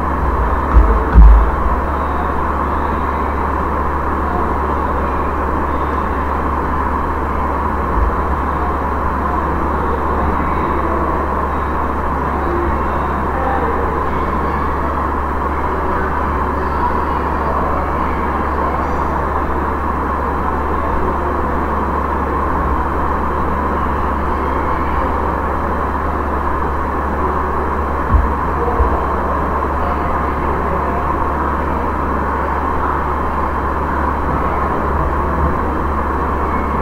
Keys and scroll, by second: 0.0-0.8 typing, 1.1 Return, 7.9 ctrl+v, 22.5 Right.